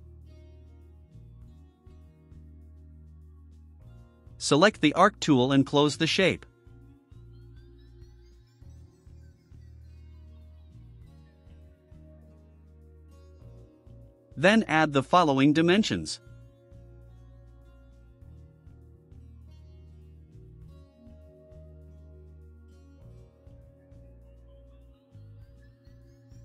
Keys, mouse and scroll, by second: 6.0 click, 6.5 middle click, 6.8 middle click, 7.6 click, 9.2 click, 10.5 click, 11.1 right click, 12.1 scroll down 2, 12.4-13.1 right drag, 13.8 scroll up 1, 13.9 scroll down 1, 14.0-14.5 scroll up 2, 15.7 click, 16.0 right click, 16.8 click, 18.5 click, 20.9 click, 21.6 click, 24.7 click, 25.7 click.